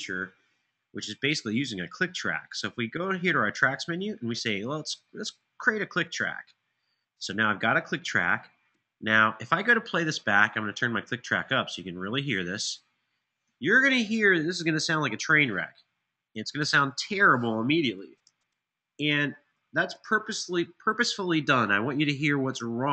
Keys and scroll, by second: 9.9 super+=, 13.2 super+=, 17.9 Tab, 19.3 super+], 19.7 super+].